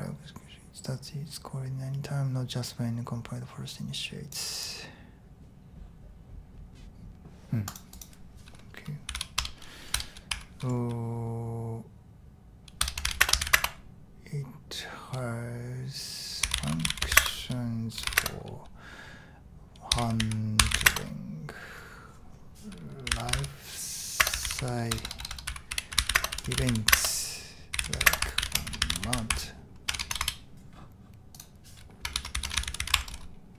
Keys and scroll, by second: 8.8-10.3 typing, 12.8-13.9 typing, 16.2-21.3 typing, 22.8-29.6 typing, 30.2 Return, 32.1-33.5 typing.